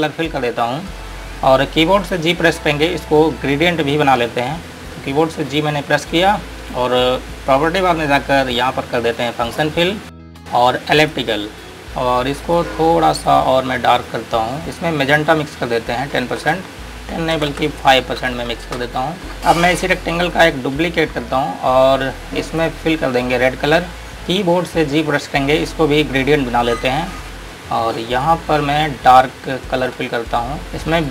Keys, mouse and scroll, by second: 1.0 click, 9.7 click, 16.5 KP_1, 17.5 BackSpace, 18.3 KP_5, 19.0 KP_Enter, 19.4 click, 23.3-24.0 scroll up 1, 24.2 click, 24.8-25.4 scroll up 1, 25.4-26.2 scroll down 1, 26.2-27.2 scroll up 1, 27.2 click.